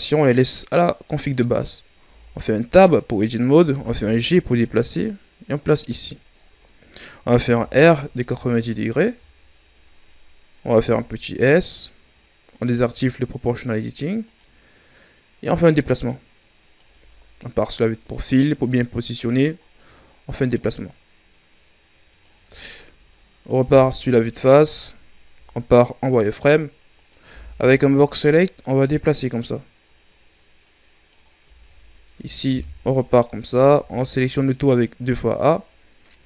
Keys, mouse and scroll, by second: 1.9 Tab, 3.7 g, 6.4-7.0 ctrl+scroll up 8, 7.5 r, 9.9-10.5 scroll up 3, 10.7 s, 14.2-17.5 drag, 17.5 KP_3, 19.7-23.6 drag, 23.6 KP_1, 25.3 z, 26.9 right click, 27.2 b, 28.8-31.4 drag, 31.4 z, 32.1 KP_3, 33.4 a, 33.7 a, 36.1 s.